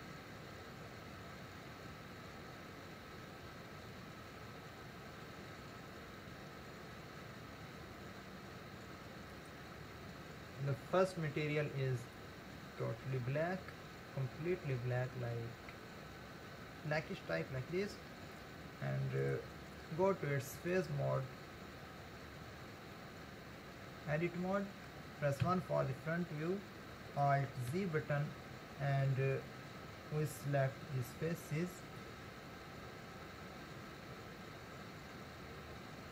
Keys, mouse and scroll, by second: 9.3 click, 19.2 click, 20.1 Tab, 21.9-23.0 scroll up 1, 23.0-25.5 middle drag, 25.5 KP_1, 26.4-26.8 scroll up 2, 27.7 alt+z, 32.0 click.